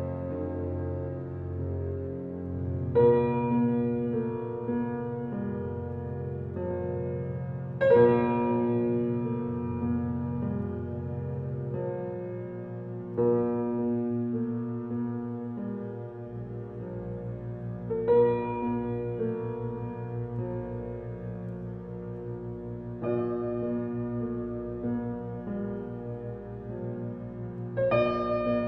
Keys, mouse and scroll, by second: 3.7 space, 3.9 click, 4.2 space, 5.5-9.5 drag, 18.6 space, 18.8 click, 19.1 space, 20.8-22.9 drag, 22.9-24.3 alt+right drag, 24.3-28.6 drag.